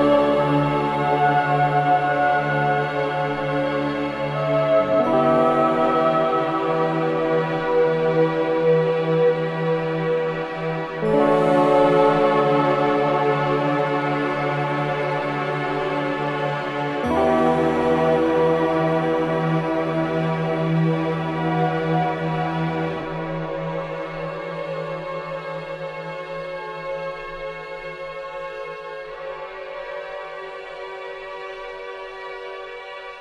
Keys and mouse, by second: 0.4 typing, 0.5-2.9 drag, 1.9-2.7 typing, 4.0-4.9 typing, 4.4-5.1 drag, 7.3 typing, 7.8-12.1 drag, 13.0 click, 16.8-18.9 drag, 19.1 g, 19.8-21.5 drag, 20.9 space, 22.3-23.3 typing, 24.1-25.7 drag, 25.1 typing, 27.3 typing, 28.4-31.9 drag, 32.5 ctrl+click, 32.8-33.2 typing.